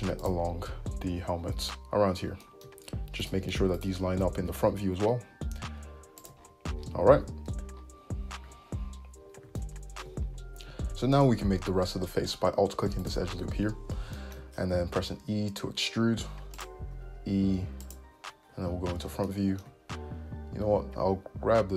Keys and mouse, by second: 1.4 `, 3.8 shift+right click, 4.5 g, 6.0-9.0 drag, 7.2 `, 8.6 `, 9.0-13.1 middle drag, 13.1 alt+click, 13.2-14.4 alt+middle drag, 13.6 `, 15.1 e, 17.0 e, 18.6 middle click, 18.6 `, 20.7 g.